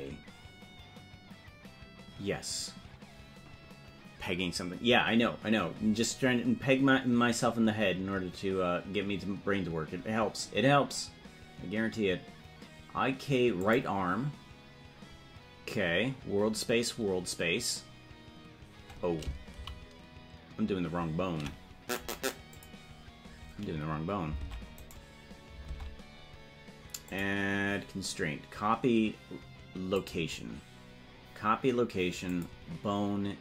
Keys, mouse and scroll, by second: 22.4 click, 24.4 ctrl+Tab, 24.9 right click, 25.7 ctrl+Tab, 27.0-30.7 drag, 32.2 click.